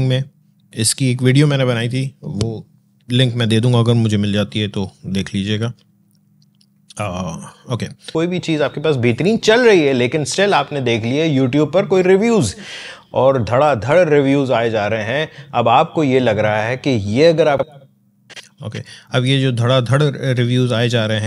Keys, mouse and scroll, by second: 15.1 scroll down 1, 16.2 scroll up 1, 17.5-20.8 drag, 20.8 alt+scroll up 1.